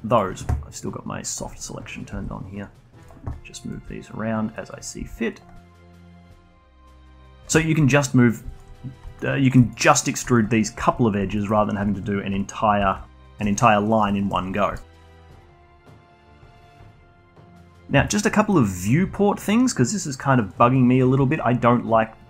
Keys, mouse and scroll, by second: 1.2 click, 1.5-2.0 scroll up 2, 2.0 g, 3.6 click, 3.7 g, 4.5 click, 5.7 click, 5.9 g, 6.5-7.3 alt+drag, 7.3 scroll down 1, 7.6-11.3 alt+drag, 11.3 alt+middle drag, 11.6 scroll down 1, 11.8-12.9 alt+drag, 13.1-13.7 alt+drag, 13.7 a, 14.0 2, 14.2 2, 14.6 shift+click, 15.0 click, 15.3 2, 15.7 alt+shift+click, 16.5-16.9 alt+drag, 16.9 scroll up 2, 17.1 alt+middle drag, 18.4 middle click, 19.1-22.2 alt+drag.